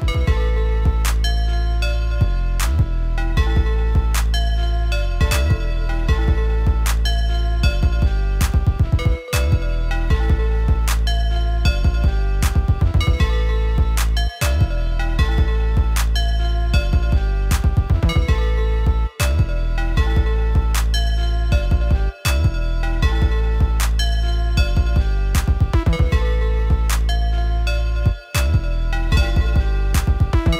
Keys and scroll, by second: 12.1 ctrl+Up, 15.6 ctrl+Up, 20.5 ctrl+Up, 21.3 ctrl+Up, 22.9 ctrl+Up.